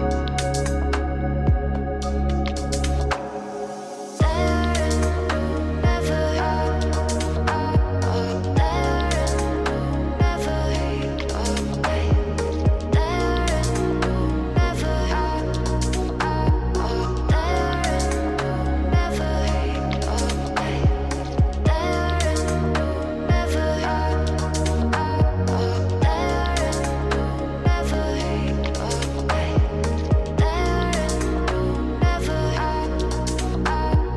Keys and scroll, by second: 22.6 ctrl+space, 29.4 ctrl+z.